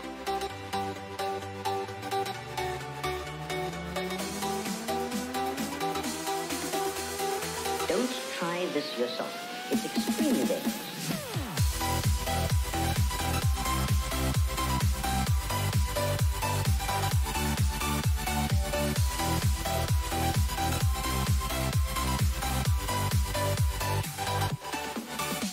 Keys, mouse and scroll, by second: 16.6 n, 17.5-22.7 middle drag, 22.7-24.9 drag.